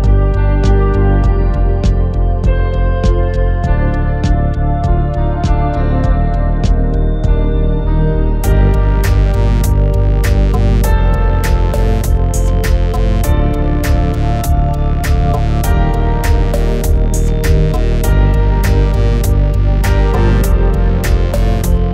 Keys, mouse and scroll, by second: 1.5 r, 1.7 click, 2.1 g, 2.4 r, 3.0 click, 3.2 g, 3.7 shift+middle click, 4.3 click, 5.2 click, 5.2 g, 5.9 click, 5.9 g, 6.0 click, 6.8-7.6 scroll down 6, 6.9 shift+middle click, 7.1 shift+middle drag, 7.2 shift+middle click, 7.3 click, 7.6 shift+a, 7.9 click, 8.6 scroll up 3, 8.7 shift+middle click, 8.8 scroll down 1, 8.8 shift+a, 9.2 /, 9.4 scroll down 1, 9.5 x, 9.5 shift+a, 9.8 click, 9.9 shift+middle click, 10.1 middle click, 10.9 click, 11.0-14.7 typing, 11.0 scroll down 4, 11.1 scroll up 2, 11.3 click, 11.3 scroll down 2, 11.9 click, 12.0 scroll down 1, 12.1 shift+middle click, 12.8 click, 13.7 scroll down 1, 13.8 shift+middle click, 15.9 click, 16.2 g, 17.4 click, 17.7 shift+a, 18.0 /, 18.1 click, 18.2 x, 18.3 shift+a, 18.5 middle click, 18.5 scroll down 3, 18.6 shift+middle click, 18.7 shift+middle click, 19.1 ctrl+s, 19.1 click, 19.3-19.6 scroll down 7, 19.4 scroll up 2, 19.6 /, 19.8 /, 19.9 x, 20.1 middle click, 20.2 scroll down 1, 20.4 shift+middle click, 20.5 click, 20.7 middle click, 20.8-21.1 scroll up 5, 20.8 shift+a, 21.1 shift+middle click, 21.1 scroll down 2, 21.2 shift+middle click, 21.3 click, 21.7 click.